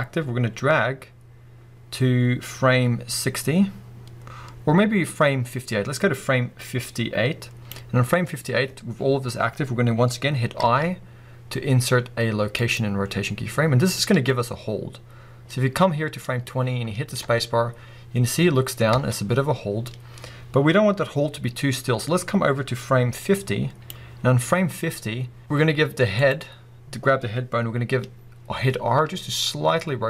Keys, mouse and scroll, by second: 8.7-10.6 scroll up 2, 15.9 click, 16.7 scroll down 2, 17.2 space, 17.6-26.3 drag, 18.9 space, 24.2 scroll up 1, 28.8 r.